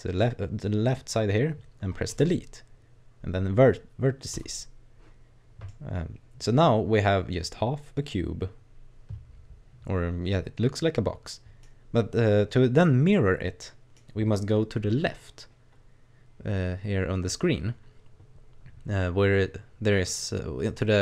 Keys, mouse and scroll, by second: 2.1 click, 5.7 middle click, 12.6-13.1 scroll down 1, 13.1 middle click.